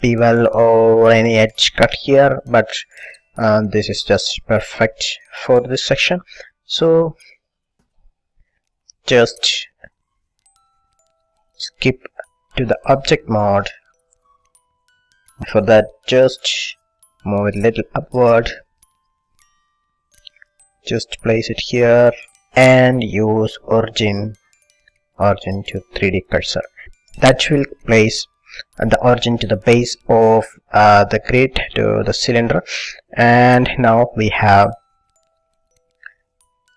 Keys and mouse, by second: 6.6 a, 7.0-8.0 middle drag, 8.0 KP_1, 9.6 middle click, 9.6 a, 11.1-12.5 middle drag, 13.4 click, 13.9-15.3 middle drag, 15.4 middle click, 16.2-17.5 drag, 17.7 click, 17.9 click, 18.0-19.6 middle drag, 19.6-21.3 drag, 23.7-25.4 drag, 32.1-33.9 middle drag.